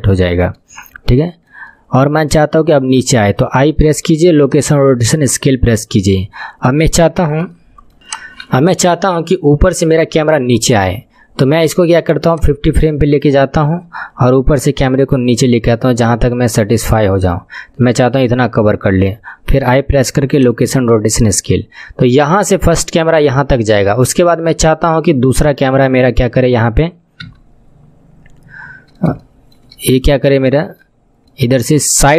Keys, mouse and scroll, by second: 0.9-3.8 shift+middle drag, 3.8 i, 6.7 scroll up 3, 7.5 shift+middle click, 12.3-16.8 drag, 19.6 i, 20.5 i, 27.2 KP_3, 27.9 scroll down 5, 28.6-29.0 scroll up 13, 29.2 shift+middle click, 30.1 shift+middle click, 30.1 scroll up 2, 30.9-31.3 scroll down 5, 31.3-32.1 middle drag.